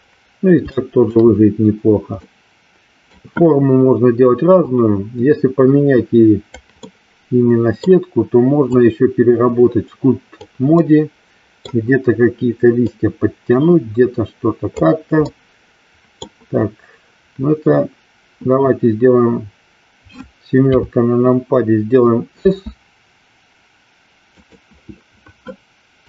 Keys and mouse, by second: 0.8 shift+middle click, 2.3-3.3 middle drag, 4.5-6.6 drag, 6.9-8.0 middle drag, 8.8-10.5 drag, 10.9 middle click, 12.9-14.9 drag, 15.4-16.4 middle drag, 20.6 KP_7, 22.4 s.